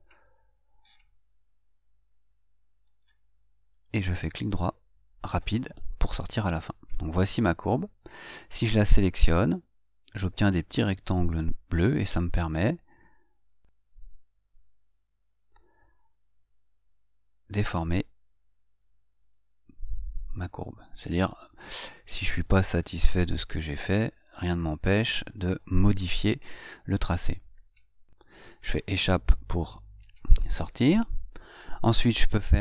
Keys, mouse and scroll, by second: 3.3 click, 19.6 click, 30.0 Escape.